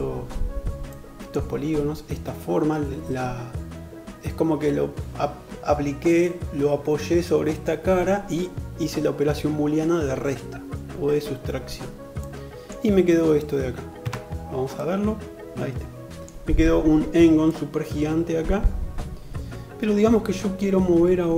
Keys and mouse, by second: 13.2 Tab.